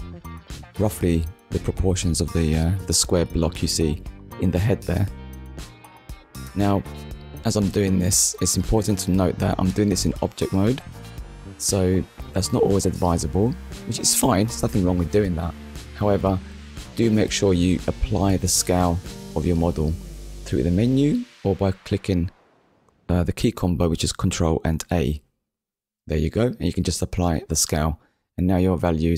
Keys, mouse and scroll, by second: 7.8 click, 11.6 click, 12.9 middle click, 18.6 click, 19.6 click, 20.6 click, 23.4 click, 25.6 ctrl+a, 28.5 click, 28.9 middle click.